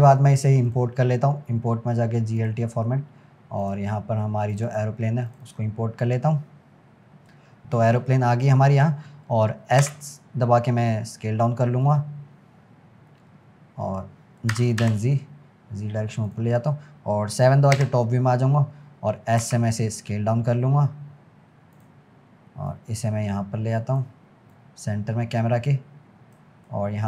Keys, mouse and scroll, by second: 0.7-3.8 drag, 7.3-9.6 scroll down 12, 12.3-12.9 scroll up 10, 14.6 g, 17.8 KP_7, 18.9 scroll up 2, 19.4 s, 22.7 click, 24.6 click, 26.9-27.0 middle drag.